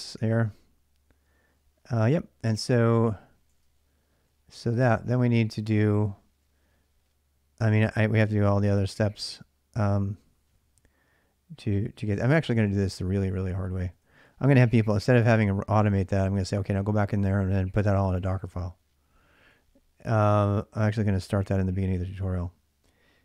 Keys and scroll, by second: 0.3 ctrl+j, 0.3 k, 3.3 ctrl+[, 3.5-6.2 typing, 4.9 ctrl+[, 7.7-8.2 j, 12.1-16.4 typing, 19.2-23.2 typing.